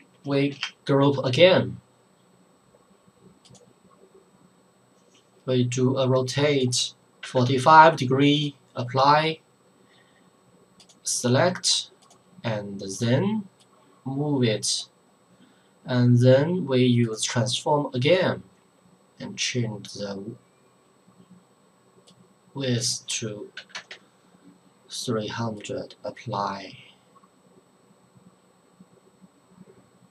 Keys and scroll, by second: 0.5 ctrl+g, 7.2 KP_4, 7.4 KP_5, 23.6 KP_3, 23.7 KP_0, 23.9 KP_0.